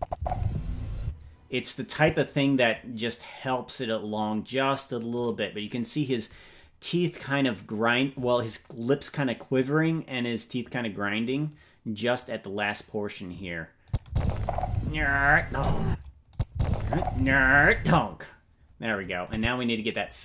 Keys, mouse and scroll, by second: 0.1 space, 1.0 space, 2.0 click, 5.1 right click, 13.8 click, 14.0 space, 15.8 space, 16.2 click, 16.4 space, 17.8 space, 19.2 click.